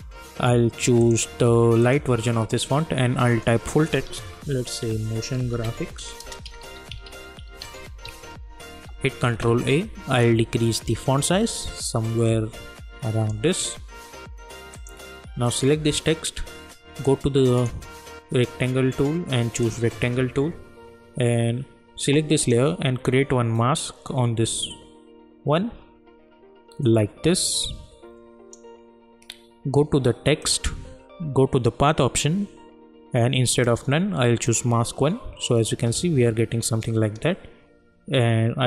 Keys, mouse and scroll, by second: 4.6-8.5 typing, 9.4 ctrl+a, 10.7-19.6 drag, 22.4 click, 24.7-30.4 drag.